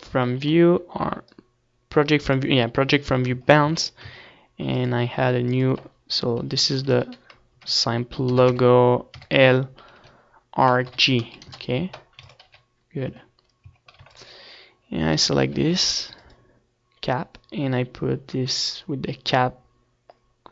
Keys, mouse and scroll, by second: 1.4 Tab, 1.8 a, 2.1 a, 2.8 u, 5.5 u, 8.4 Tab, 8.7 Tab, 9.1 Tab, 9.9-16.7 right drag, 17.6 ctrl+s, 17.7 z, 17.9-20.3 middle drag, 18.2 Tab, 18.8 Tab, 19.2 ctrl+s, 20.3-20.5 right drag.